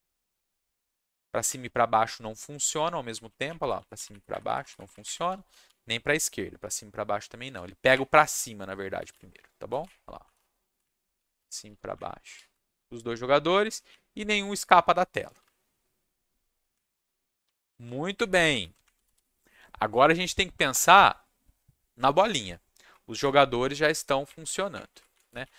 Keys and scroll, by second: 0.0-1.0 typing, 1.4 Up, 1.6 Down, 2.7 Down, 2.8 Up, 3.2 Up, 3.4 Up, 3.4 Down, 3.7 Up, 3.9 Down, 4.1 Up, 4.3 Up, 4.3 Down, 4.4 Up, 4.6 Down, 4.7 Up, 4.9 Up, 4.9 Down, 5.0-6.1 typing, 7.8 w, 7.9 Up, 9.1-12.7 typing, 10.8 Up, 11.4 Down, 11.9 Up, 12.5 Down, 13.9 w, 15.2 Up, 15.4 s, 15.4 Down, 16.7-19.6 typing, 17.7 Down, 17.8 Down, 22.9 Down, 23.2 Up, 23.2-25.5 typing, 23.8 Down, 24.5 Up.